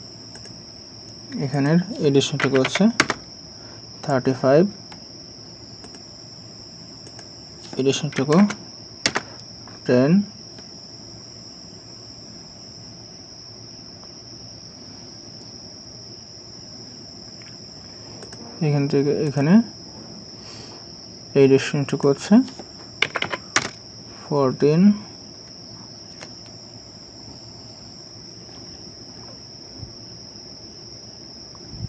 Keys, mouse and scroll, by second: 2.4 typing, 3.0 Return, 8.1 typing, 9.1 Return, 23.0 typing, 23.6 Return, 25.5-25.8 scroll down 1.